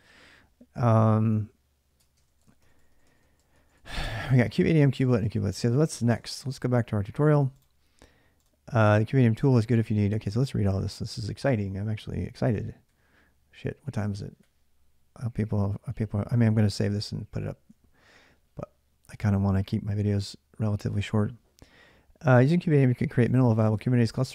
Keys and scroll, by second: 0.0-5.7 typing, 1.8 ctrl+[, 4.1 Return, 4.1 ctrl+[, 5.9 alt+Tab, 12.7 ctrl+=, 14.2 ctrl+=, 16.7 ctrl+=, 16.7 ctrl+-.